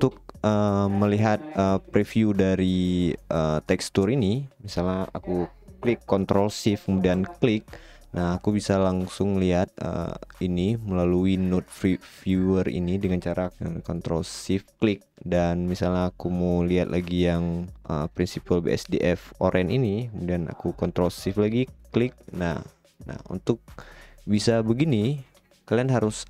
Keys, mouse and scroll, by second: 4.4 right click, 5.9 right click, 9.1 middle click, 18.2-18.6 middle drag, 20.4 right click.